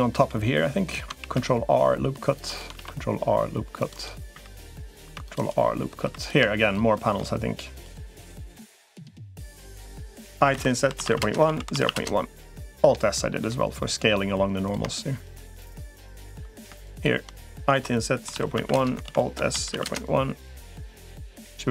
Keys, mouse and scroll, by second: 1.0 ctrl+r, 2.6 ctrl+r, 4.2 3, 4.4 click, 4.8 ctrl+r, 6.0 click, 6.0 3, 6.4 shift+click, 10.4 typing, 11.2 alt+s, 12.9 middle click, 13.6 middle click, 14.4 click, 17.6 i, 18.8 alt+s, 20.6 middle click.